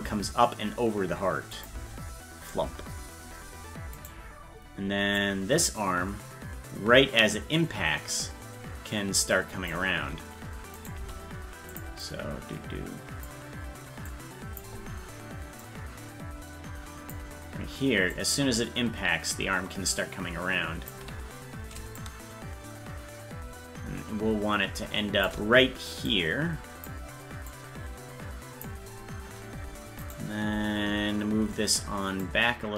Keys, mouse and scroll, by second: 1.6 click, 1.6 space, 4.1 right click, 5.2-9.7 drag, 10.7 right click, 11.0 g, 12.0-13.3 drag, 14.1 click, 15.6-17.1 drag, 18.2-20.9 drag, 22.0-25.3 shift+drag, 26.1 click, 27.5-28.6 drag, 30.1 right click, 32.2-32.7 drag.